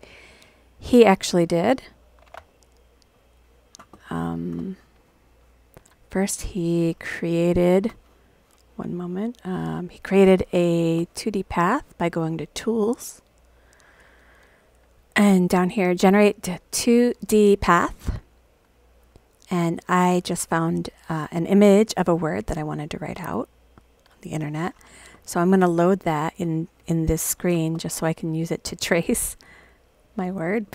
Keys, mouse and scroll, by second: 9.9 click, 12.3 click, 17.6 click, 21.9-24.5 drag, 22.5-23.5 scroll up 1, 29.9 click.